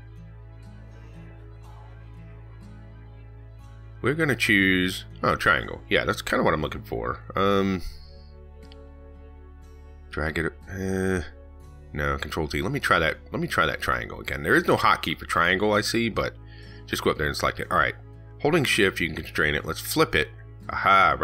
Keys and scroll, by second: 13.6 ctrl+z.